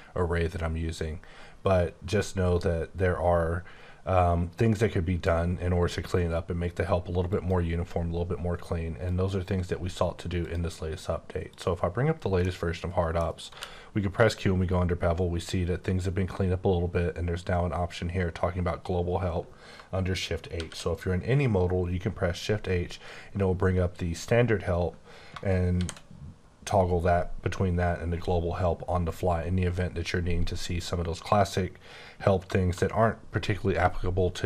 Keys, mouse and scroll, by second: 7.3 click, 11.5 click, 12.4 middle click, 13.5 q, 14.2 click, 20.6 h, 25.8 h.